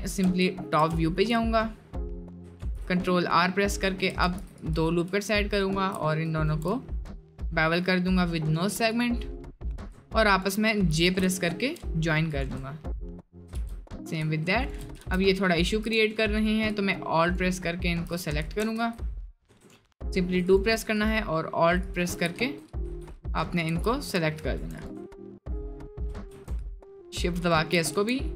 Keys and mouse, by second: 0.5 shift+middle click, 1.1 shift+middle click, 2.6 ctrl+r, 5.7 alt+shift+click, 9.7 click, 10.3 shift+click, 11.0 j, 11.4 shift+click, 12.3 click, 13.6 j, 14.9 s, 15.7 s, 16.4 alt+click, 17.3 alt+shift+click, 18.4 ctrl+z, 18.7 1, 19.4 2, 20.4 alt+click, 21.0 alt+shift+click, 22.4 1, 22.9 g, 23.7 g, 24.7 2, 24.7 alt+click, 25.2 alt+shift+click, 25.8 alt+shift+click, 27.5 alt+shift+click.